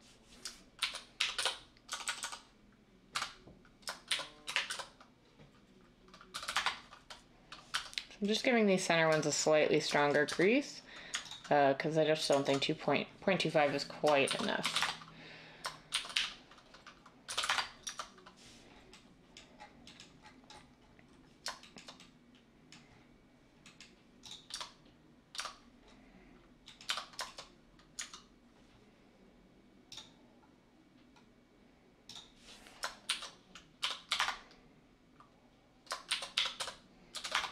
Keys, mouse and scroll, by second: 0.0-2.2 typing, 3.1 Escape, 4.1-4.7 typing, 6.3-7.0 typing, 7.7 Tab, 10.2 Tab, 14.6-18.0 typing, 20.8-21.6 typing, 24.5 Tab, 25.3 Tab, 26.8 Tab, 33.0-34.1 typing, 36.1-37.5 typing.